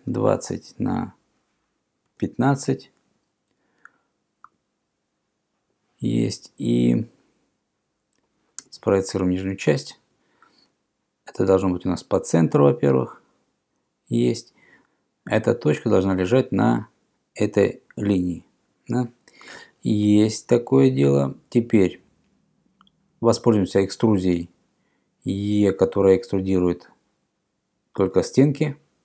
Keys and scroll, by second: 0.0-0.3 typing, 0.6 Tab, 2.0-2.8 typing, 4.5 Return, 8.7 p, 14.8 BackSpace, 21.0 Escape, 24.4 e.